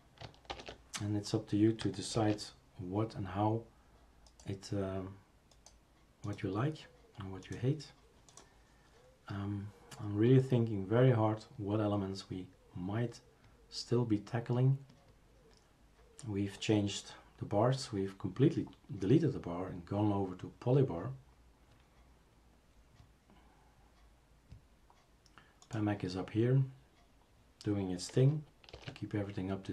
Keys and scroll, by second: 0.5 shift+super+Return, 2.1 shift+super+q, 28.7 shift+super+q.